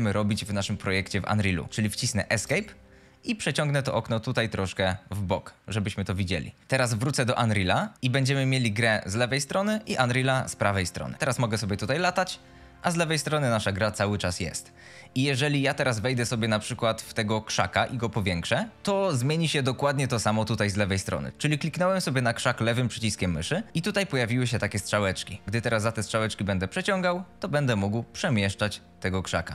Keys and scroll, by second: 2.3 Escape, 11.1 a, 11.5 s, 12.5 w, 16.2 a, 18.7 s, 23.7 s.